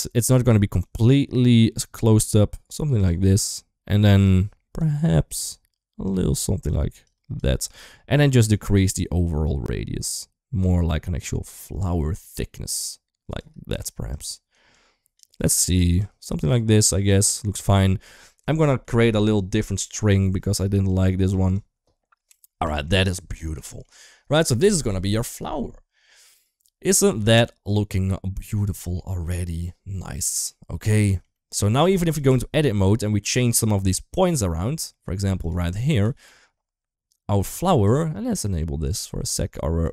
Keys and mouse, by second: 0.7-2.1 drag, 2.7 click, 4.1 click, 6.0 click, 6.8-7.2 drag, 7.7 middle click, 8.4-13.2 shift+drag, 13.9 click, 14.5 click, 16.7 click, 17.9 shift+middle click, 18.3 Tab, 18.6 a, 19.3 Delete, 20.6 click, 22.2 Tab, 22.4 shift+middle drag, 23.4 shift+middle drag, 25.0 click, 26.1-26.7 middle drag, 27.5 ctrl+s, 27.5-28.7 middle drag, 29.0 middle drag, 30.8 shift+middle click, 31.2 middle click, 31.9 click, 32.2 Tab, 33.3 click, 35.2 click, 35.8 g, 39.6 click.